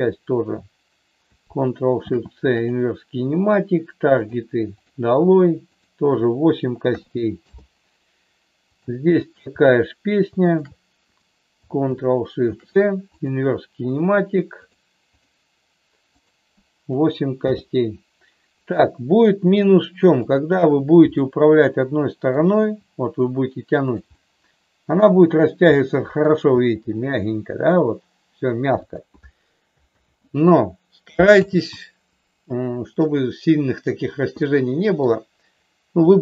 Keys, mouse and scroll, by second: 2.0 ctrl+shift+c, 4.2 click, 4.7 click, 5.7-7.7 drag, 8.7-10.0 drag, 10.4-11.8 shift+drag, 12.4 ctrl+shift+c, 16.1-17.6 drag, 18.7 middle click, 20.2-21.6 drag, 21.7 middle click, 22.6 g, 24.1-25.3 middle drag, 25.7 middle click, 26.5 g, 29.9 ctrl+z, 31.5 ctrl+z, 32.9 middle click, 34.5 middle click, 36.1-36.2 drag.